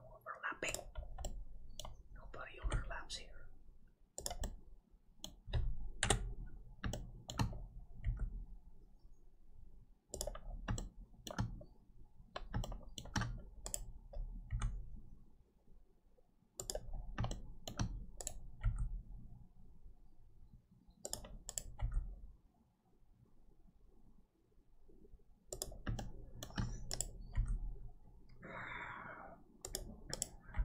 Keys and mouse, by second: 1.3 middle click, 2.6 g, 4.4 middle click, 6.0 KP_7, 6.9 shift+middle click, 8.0 g, 10.8 shift+middle click, 12.6 shift+middle click, 14.5 g, 17.3 shift+middle click, 18.6 g, 21.8 g, 26.1 shift+middle click, 27.3 g, 30.5 g.